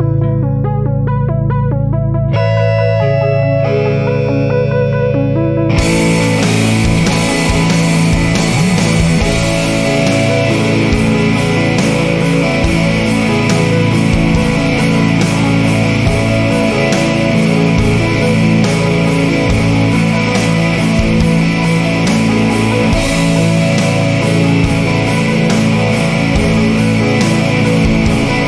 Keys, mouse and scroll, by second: 0.9-1.3 scroll up 2, 3.3 click, 4.8 scroll up 1, 6.7 click, 7.9 scroll up 2, 9.8 click, 11.1 scroll up 2, 12.1-12.7 scroll down 2, 14.6 click, 16.0 scroll up 2, 18.0 click, 19.2 scroll up 2, 20.1-20.5 scroll down 2, 21.0-21.3 scroll up 2, 22.3 click, 23.5 scroll up 2, 25.9 click, 27.0 scroll up 1, 27.8-28.2 scroll down 1.